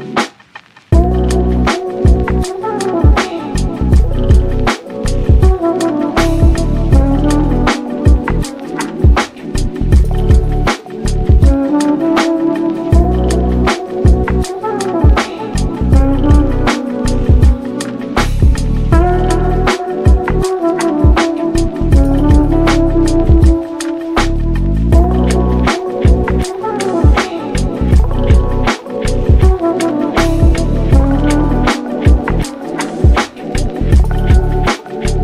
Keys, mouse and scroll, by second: 0.7 s, 1.3 scroll down 1, 1.6-2.3 middle drag, 2.3 g, 5.7-6.9 drag, 6.9-8.2 middle drag, 8.2 KP_3, 8.6 scroll up 3, 8.8-9.3 shift+middle drag, 9.3 g, 10.5 scroll down 1, 10.7-11.7 middle drag, 11.7 g, 12.3 click, 12.6 scroll up 1, 12.7-13.6 middle drag, 13.6 ctrl+s, 14.0-14.8 shift+middle drag, 14.8 click, 15.0 scroll up 1, 15.2-15.7 middle drag, 15.7 shift+d, 16.3 g, 17.2 Tab, 17.8 Tab, 18.5-19.0 drag, 19.0 Tab, 19.4 click, 20.0 3, 20.1 click, 20.6 x, 21.8 click, 22.0 x, 22.2 click, 22.4 x, 23.0 click, 23.2 x, 23.6 ctrl+a, 24.0 Tab, 24.3 ctrl+a, 25.4 KP_3, 25.9 Tab, 27.1 z, 27.8 1, 28.3-29.3 middle drag, 29.3 Tab, 29.5 Tab, 30.0 1, 30.7 scroll up 2, 30.9 click, 31.9 1, 32.3 2, 33.1 Tab, 33.6 1, 34.0-34.4 scroll up 1, 34.4 click, 35.0-35.2 shift+middle drag.